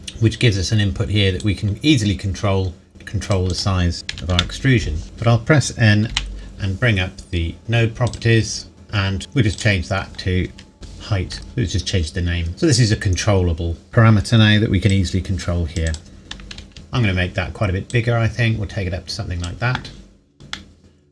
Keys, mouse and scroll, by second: 1.4 click, 4.1 KP_1, 4.3 KP_Enter, 5.0 n, 8.1 click, 9.5 click, 10.7 8, 11.3 KP_Enter, 14.9 click, 16.7-17.9 scroll down 1, 17.9 click, 20.5 middle click.